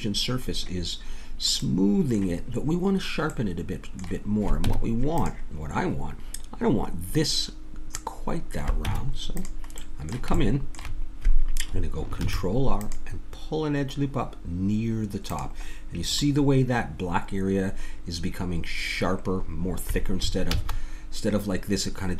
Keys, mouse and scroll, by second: 0.4-5.3 middle drag, 4.7 Tab, 8.8 Tab, 9.8 middle click, 12.2 ctrl+r, 16.1-20.5 middle drag, 20.5 ctrl+z.